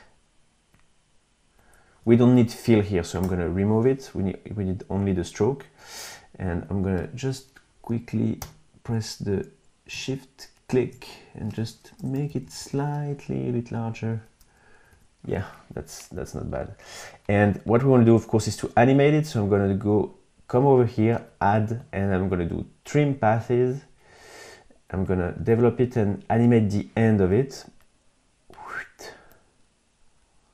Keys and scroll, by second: 3.3 Delete, 8.4 v, 12.0 Left, 14.7 Right.